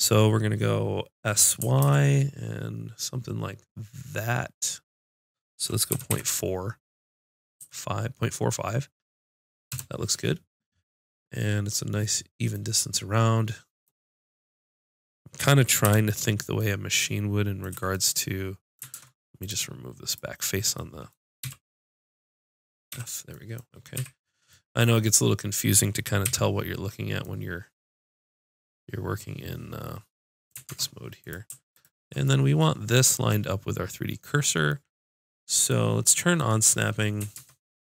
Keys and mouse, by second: 1.6 s, 12.6 middle click, 15.9 KP_Decimal, 17.7 z, 18.9 ctrl+Tab, 19.8-21.1 drag, 21.4 x, 24.0 z, 26.3 KP_5, 30.7 ctrl+Tab, 31.7 click, 37.4 ctrl+Tab.